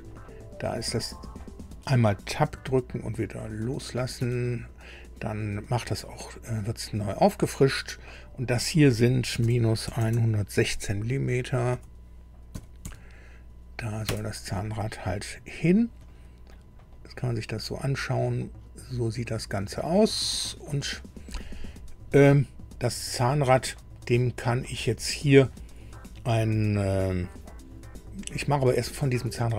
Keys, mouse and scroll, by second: 2.4 Tab, 4.1 Tab, 5.3 click, 7.7 click, 9.8 KP_1, 10.0 KP_0, 12.5 KP_1, 12.8 KP_6, 14.0 KP_Enter, 15.5-15.9 scroll up 2, 16.0 shift+middle click, 16.9 shift+middle click, 17.0-19.3 drag, 19.3-21.1 middle drag, 21.9 scroll down 2, 22.3 middle click.